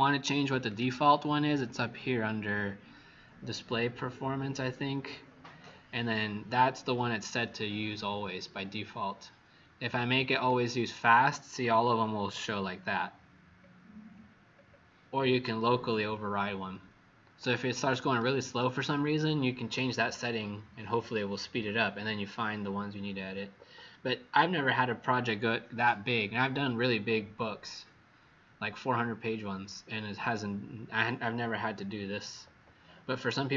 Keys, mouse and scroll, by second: 0.6 click, 11.8-12.4 alt+scroll down 5, 14.5-14.8 alt+scroll down 3, 17.3 click.